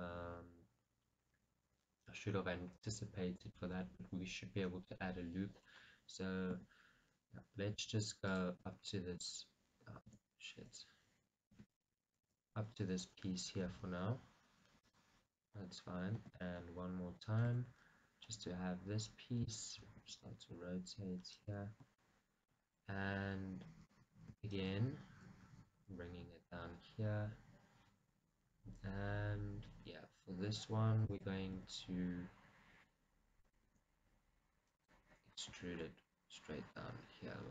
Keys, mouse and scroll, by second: 6.9 e, 8.6 click, 9.0 g, 9.7 right click, 10.4 ctrl+z, 11.9 e, 12.3 right click, 12.5 g, 15.1 click, 16.5 e, 16.8 right click, 17.6 g, 19.8 click, 20.3 r, 22.1-25.2 shift+drag, 24.9 e, 25.2 right click, 25.6 g, 31.5 click, 31.9 s, 33.7 click, 34.0 r, 35.1 click, 35.8 e.